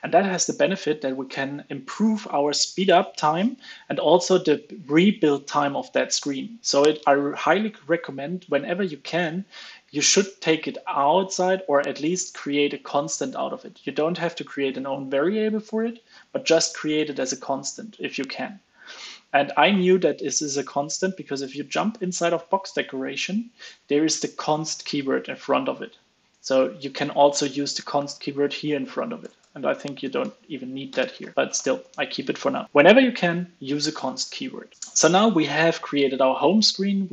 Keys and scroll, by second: 22.5 super+b, 26.4 alt+super+Left, 29.6 super+s, 30.2 alt+super+l, 30.4 super+s, 31.3 super+s, 31.5 alt+super+l, 36.4 super+s.